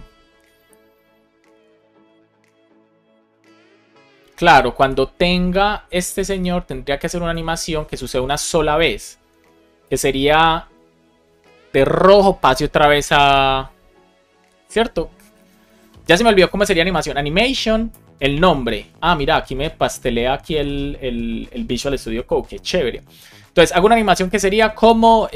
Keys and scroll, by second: 4.7 super+Left, 15.3 Down, 15.7 super+Right, 16.0 Return, 17.9 Return, 23.3 Left, 23.7 Right.